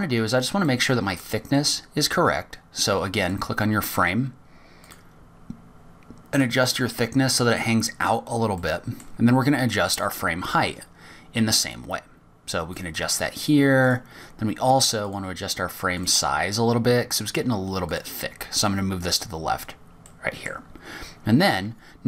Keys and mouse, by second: 1.5-2.0 middle drag, 5.6 click, 7.1 click, 9.4 middle click, 14.6 click, 15.8 click, 17.9 click, 18.6 click, 20.9 middle click.